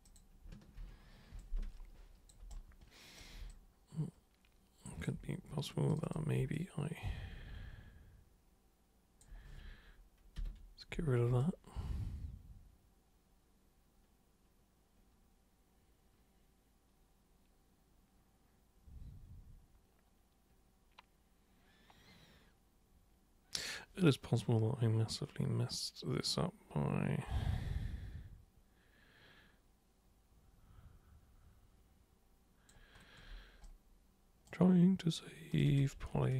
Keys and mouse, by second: 0.0 click, 0.8 ctrl+1, 1.4 alt+super+click, 2.5 super+right click, 3.5-5.0 alt+super+drag, 5.9 super+click, 6.5-9.2 alt+super+drag, 11.4-32.6 drag, 33.6 super+right click, 35.5 super+click, 35.7 super+click.